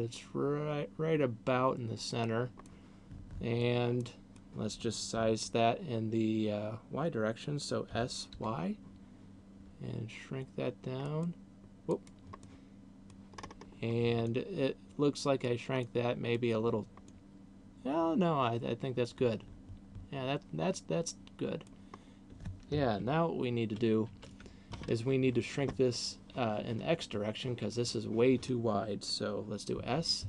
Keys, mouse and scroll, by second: 2.0 click, 2.7 middle click, 4.2 middle click, 7.7 s, 12.0 click, 12.5 middle click, 13.5-13.9 scroll up 5, 14.5 middle click, 15.7 middle click, 17.0 middle click, 22.0 scroll down 1, 23.0-23.7 ctrl+KP_2, 24.0 ctrl+KP_6, 29.7 s.